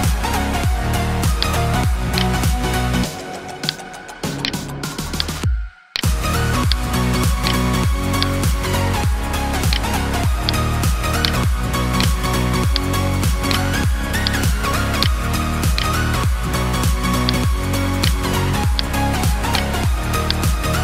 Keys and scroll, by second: 2.7 ctrl+t, 9.7 ctrl+space, 10.1 ctrl+space, 10.9 ctrl+space, 15.6 Delete, 17.3 ctrl+t.